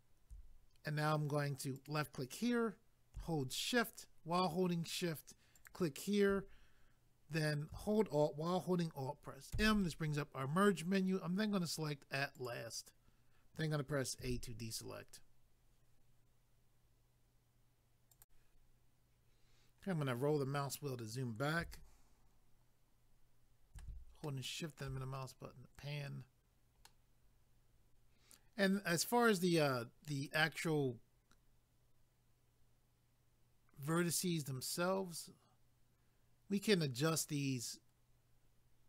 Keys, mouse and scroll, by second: 1.8 click, 5.6 shift+click, 12.4 click, 18.1 click, 19.4 scroll down 1, 21.8 shift+middle click, 24.2 shift+middle click, 25.0 scroll down 1, 26.8 middle click, 30.3 scroll up 1, 36.8 scroll down 1.